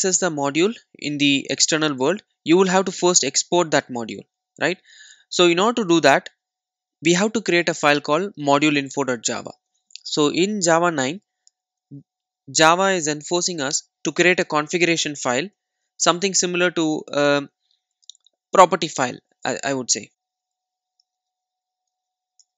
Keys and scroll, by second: 15.9 super+n.